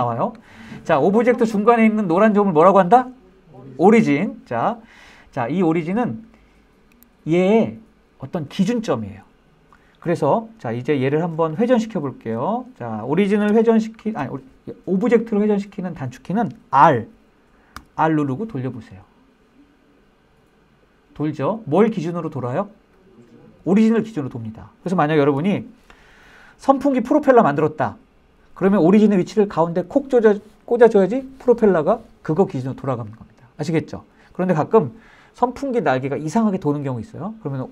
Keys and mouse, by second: 5.3 middle click, 17.3 r, 24.9 Escape.